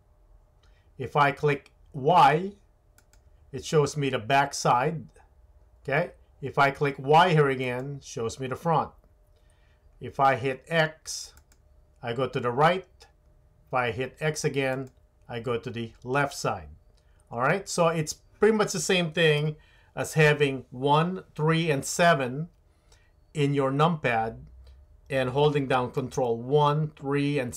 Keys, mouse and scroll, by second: 2.9 click, 7.7 click, 11.3 click, 14.7 click, 19.4 KP_1.